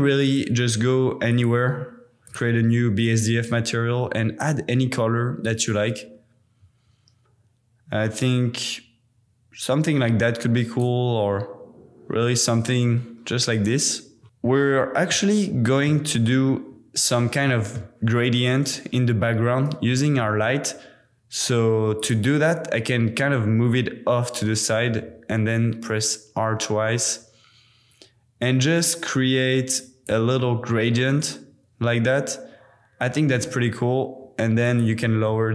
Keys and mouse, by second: 0.3 click, 1.3 click, 2.3-3.0 drag, 15.2 middle click, 15.3-15.7 drag, 15.9-17.5 middle drag, 17.8-19.8 middle drag, 19.7 g, 20.2 x, 22.0 click, 24.7 r, 25.0 r, 29.8 click, 34.6-35.5 drag.